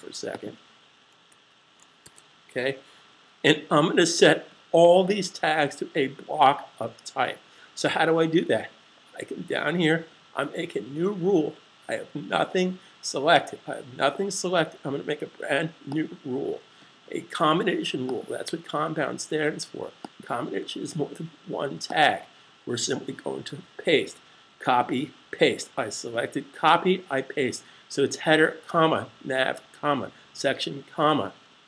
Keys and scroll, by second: 1.1 super+z, 2.0 super+s, 23.3 super+v.